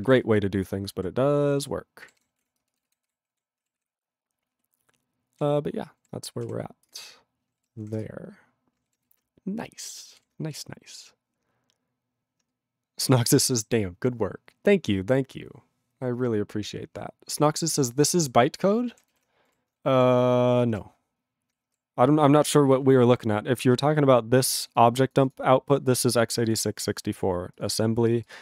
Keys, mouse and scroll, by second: 0.0 ctrl+g, 0.1 ctrl+e, 0.3-0.8 ctrl+n, 0.9 ctrl+a, 2.2 ctrl+g, 2.3 ctrl+p, 2.4 ctrl+e, 2.6 ctrl+space, 3.0 ctrl+alt+b, 3.2 ctrl+g, 3.3 ctrl+a, 3.8 ctrl+s, 3.8-5.3 ctrl+p, 5.9 ctrl+p, 6.9 Return, 8.0 Return, 10.2 ctrl+g, 19.5 ctrl+g, 20.9 ctrl+g, 28.3 click, 28.3 click.